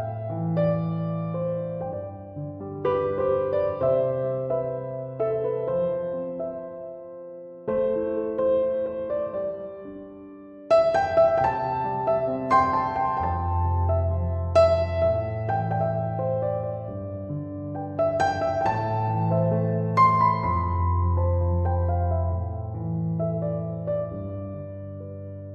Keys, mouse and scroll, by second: 4.7 ., 5.0 5, 6.0 Return, 13.2 2, 13.4 Return.